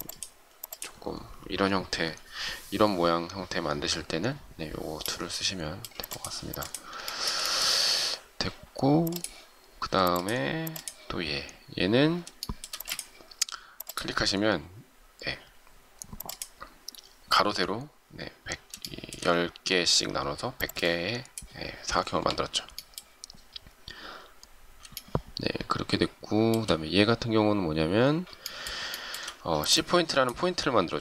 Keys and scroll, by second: 12.7 shift+space.